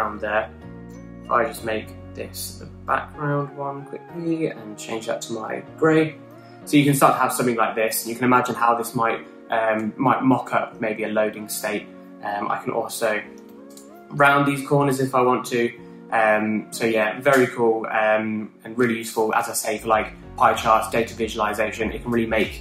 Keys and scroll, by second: 13.9-14.8 typing.